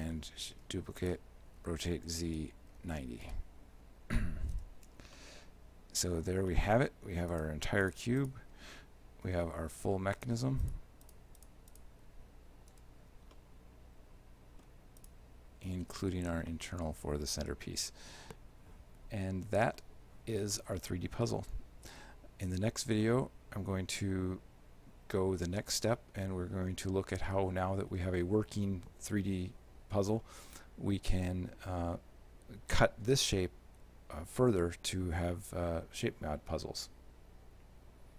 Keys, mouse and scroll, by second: 0.6 shift+d, 1.7 r, 4.6 alt+h, 5.2 shift+middle click, 6.6 middle click, 7.4 right click, 7.9 shift+right click, 8.3 shift+right click, 9.3 h, 10.2 right click, 10.7 shift+right click, 11.1 shift+right click, 11.4 shift+right click, 11.8 right click, 12.8 h, 13.4 shift+middle click, 15.1 right click, 16.0 h, 16.5 shift+middle click, 20.6 middle click, 22.0 alt+h, 23.1 shift+middle click, 26.0 middle click.